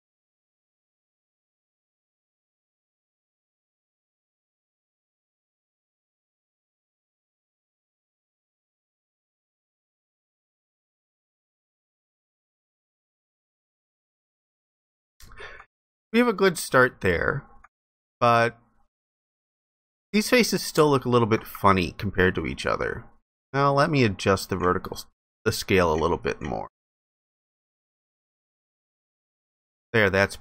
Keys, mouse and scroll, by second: 14.4 alt+click, 20.4 alt+click.